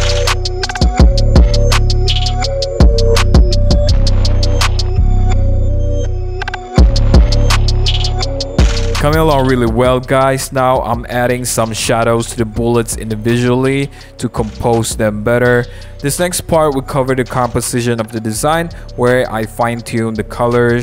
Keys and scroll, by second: 0.3 super+z, 0.5 b, 0.7 super+z, 1.7 super+z, 2.6 super+z, 3.9-5.4 typing, 4.3 super+z, 4.6 super+z, 4.7 super+z, 6.9 super+z, 10.6 super+z, 11.2 super+z, 18.4 super+z.